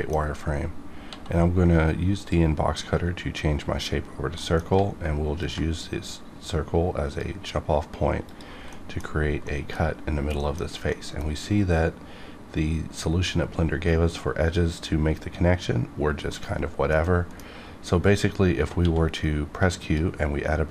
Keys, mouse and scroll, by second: 0.2 scroll up 1, 1.0 d, 2.2 click, 4.4 middle click, 5.4-8.3 ctrl+drag, 8.7 middle click, 9.1-9.4 scroll up 1, 9.4 middle click, 10.1-10.4 scroll down 1, 10.4 middle click, 16.3 middle click, 17.0 middle click, 17.9-18.8 scroll up 1, 18.8 q, 19.8 click.